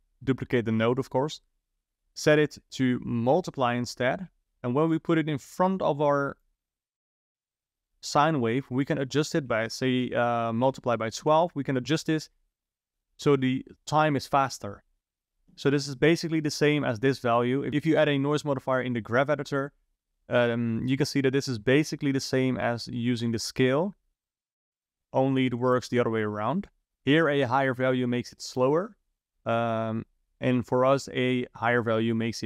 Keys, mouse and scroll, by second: 2.1-4.9 drag, 6.4 click, 7.1 click, 9.1-12.2 drag, 16.3 click, 16.8-17.7 drag, 22.6-25.0 drag, 29.5-32.4 drag.